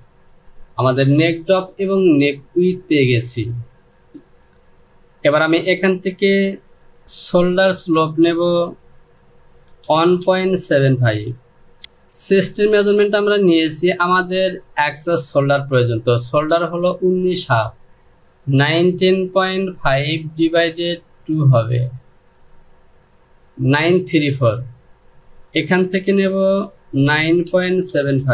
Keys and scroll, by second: 0.3 KP_3, 0.4 Return, 9.5 KP_1, 9.9 KP_Decimal, 10.4 KP_7, 10.7 KP_5, 11.5 Return, 26.7 KP_9, 27.1 KP_Decimal, 27.5 KP_7, 27.8 KP_5.